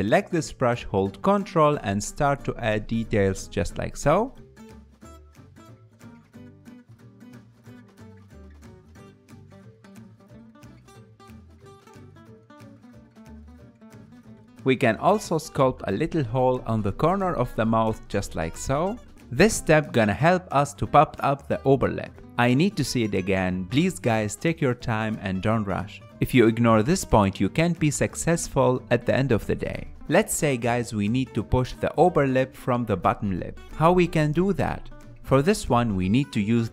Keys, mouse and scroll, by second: 0.7-3.7 ctrl+drag, 7.3 click, 7.8 f, 8.4 f, 9.3-15.9 drag, 15.9-16.9 ctrl+middle drag, 16.9-20.5 shift+drag, 20.5 middle click, 21.2-24.9 shift+drag, 24.9 middle click, 25.8-27.5 shift+drag, 27.5-30.2 ctrl+middle drag, 30.2-31.3 shift+drag, 31.3 middle click, 32.2 f, 32.4-33.5 drag, 33.5 ctrl+z, 34.6-36.7 shift+middle drag.